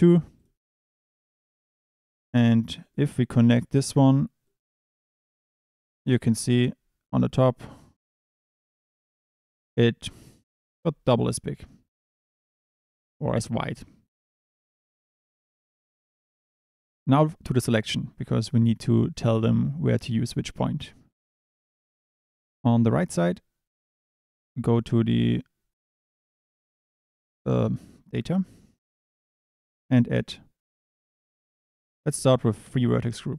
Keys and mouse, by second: 0.5 click, 1.9 click, 4.5 drag, 8.0 drag, 12.0 click, 14.5 click, 18.5 Tab, 19.1 2, 21.7 Tab, 26.5 click, 32.0 click, 33.2 click.